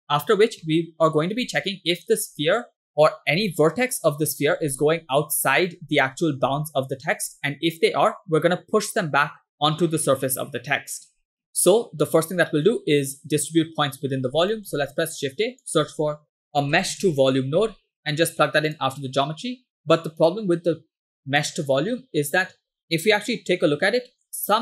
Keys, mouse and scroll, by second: 0.7-1.3 middle drag, 6.1-6.4 middle drag, 7.3-8.0 middle drag, 11.3-12.3 middle drag, 14.3 scroll down 2, 14.5 middle click, 14.8 shift+a, 16.5 BackSpace, 19.8 click, 20.4-21.5 drag, 23.2 m, 23.7 m, 24.3-24.6 scroll up 2.